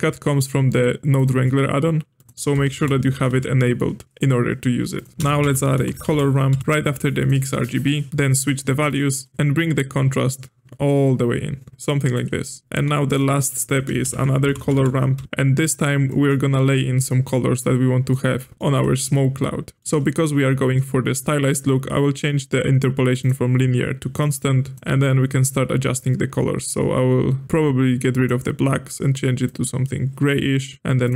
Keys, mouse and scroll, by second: 0.3-3.4 drag, 5.1 click, 5.1 space, 6.6 r, 7.5-8.1 middle drag, 8.1-12.0 drag, 12.5 middle click, 12.6 click, 12.7 g, 13.6 click, 13.9 space, 15.2 r, 16.0-16.5 middle drag, 16.5-18.0 scroll up 4, 18.0-18.9 middle drag, 19.8-22.5 middle drag, 23.1-24.7 drag, 29.4-31.1 drag.